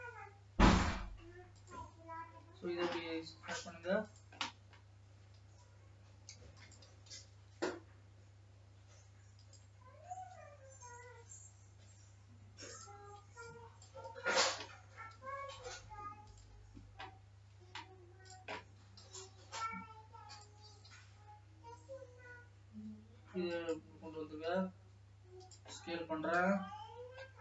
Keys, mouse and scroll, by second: 0.0-1.0 drag.